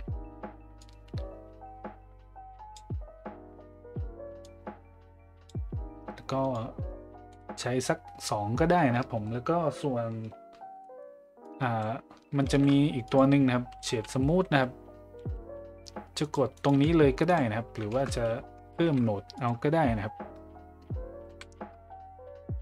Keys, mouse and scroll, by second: 0.8-2.7 drag, 4.4-5.5 drag, 6.5 click, 7.3-7.8 middle drag, 10.8 middle click, 11.5 click, 12.5 shift+a, 18.0 ctrl+z, 18.8 shift+a.